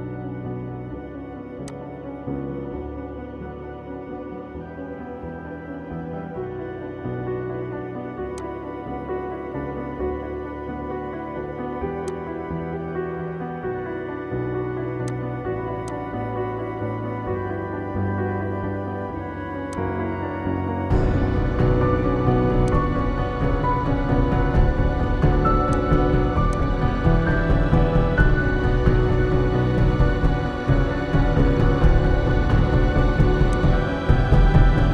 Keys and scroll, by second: 9.8 ctrl+i.